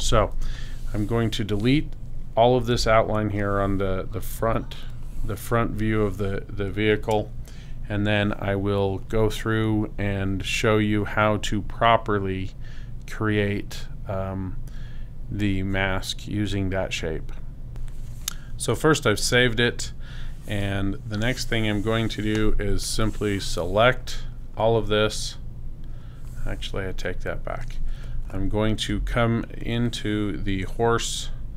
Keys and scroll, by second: 0.3 super+0, 3.3 super+space, 29.0 super+space.